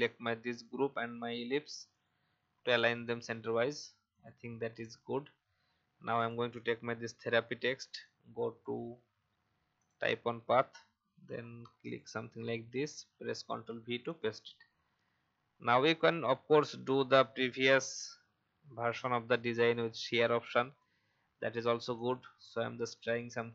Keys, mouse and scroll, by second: 0.5 shift+click, 1.9 click, 5.4-6.1 alt+scroll down 1, 6.1 click, 6.9 ctrl+x, 8.0-9.2 drag, 12.6 ctrl+v, 14.1-21.4 drag.